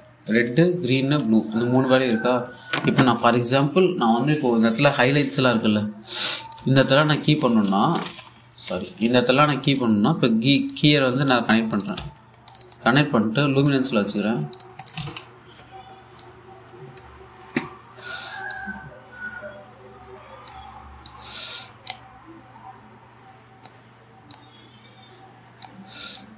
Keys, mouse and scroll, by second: 0.9-3.1 typing, 6.8 click, 7.2 g, 7.8 click, 10.3 click, 12.6 1, 13.1 click, 15.6 a, 16.8-18.7 drag, 19.2-26.3 drag.